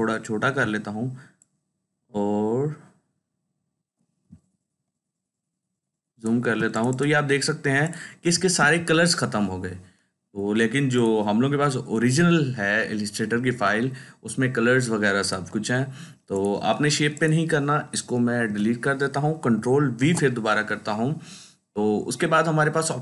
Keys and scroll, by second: 4.1 ctrl+space, 4.6 ctrl+space, 18.3 Delete, 19.9 ctrl+v.